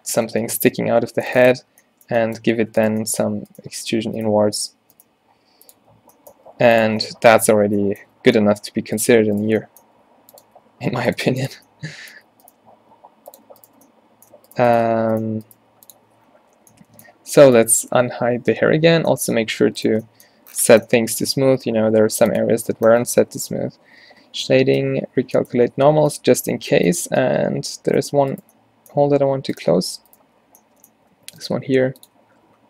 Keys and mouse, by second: 1.6 Tab, 4.1-5.7 right drag, 4.1-6.4 typing, 7.0 Tab, 7.7 Tab, 8.3 z, 9.0 click, 9.9 g, 10.5 r, 11.3 g, 12.9 e, 14.9 f, 15.6 g, 16.1 Tab, 16.3 z, 18.8 alt+h, 19.7 a, 20.0-22.0 middle drag, 23.3 Tab, 23.4 a, 23.6 a, 24.8 ctrl+n, 25.6 Tab, 25.9 z, 26.6 Tab, 27.0 a, 27.2 a, 29.1 g, 29.8 g, 30.3 f, 31.2 alt+w, 31.6 g, 32.2 a, 32.4 a.